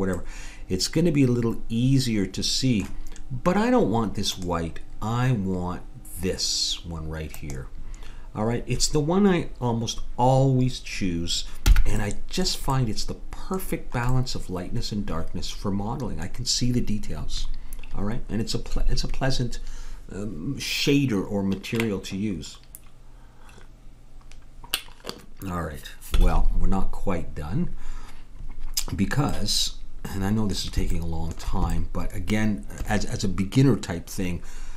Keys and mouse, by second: 0.2 middle click, 1.4 middle click, 4.3-6.1 drag, 11.7 n, 12.9 middle click, 14.3-16.0 middle drag, 29.3-34.7 middle drag.